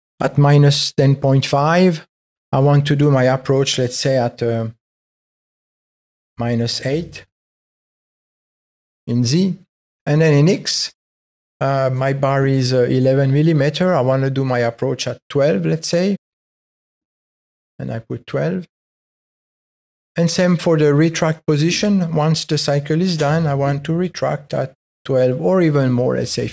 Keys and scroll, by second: 5.2 space, 16.2 space, 23.2 space.